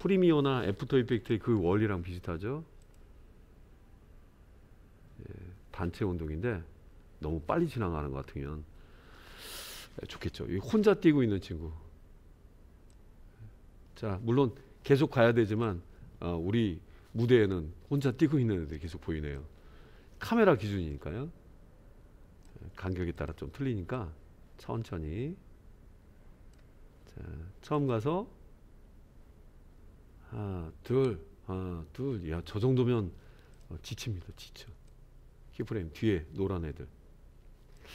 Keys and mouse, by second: 1.1 click, 2.7 click, 13.0-15.9 drag, 19.5-22.7 drag, 23.3 click, 24.0 click, 24.3-26.8 drag, 27.8-28.1 drag, 33.0 space, 33.5 click, 34.8 click, 35.7-37.8 drag.